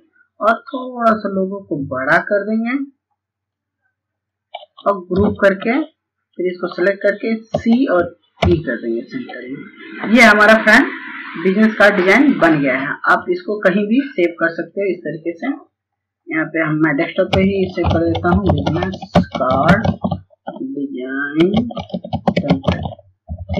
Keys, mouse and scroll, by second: 16.8-18.6 typing, 20.9 typing.